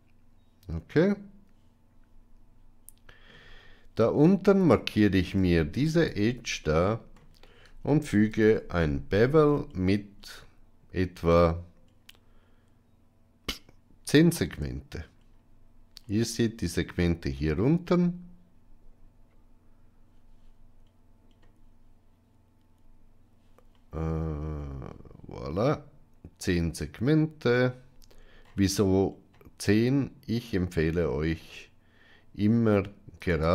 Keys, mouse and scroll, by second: 5.3 Tab, 6.5 middle click, 8.2 ctrl+b.